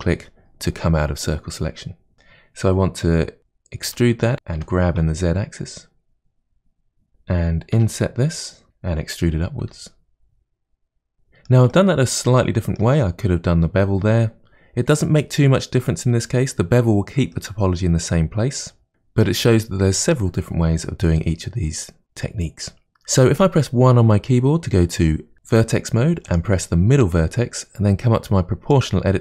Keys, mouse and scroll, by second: 2.1-3.9 middle drag, 3.9 e, 4.6 g, 7.8 i, 9.6 e, 11.1-15.4 middle drag, 17.3-18.9 middle drag, 23.2 1, 26.3 click, 28.7 click.